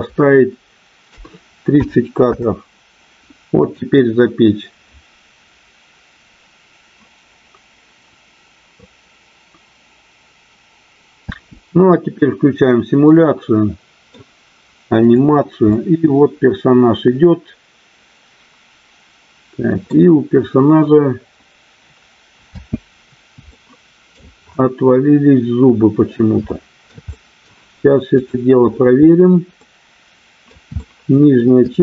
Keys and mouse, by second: 3.6-13.0 drag, 11.2 space, 13.3-14.5 middle drag, 15.2 click, 15.9-20.2 middle drag, 22.9 space, 23.5-24.0 shift+middle drag, 26.5 shift+middle click, 27.1 middle click, 28.1 click, 29.5 middle click, 30.7 shift+middle click, 31.7-31.8 shift+middle drag.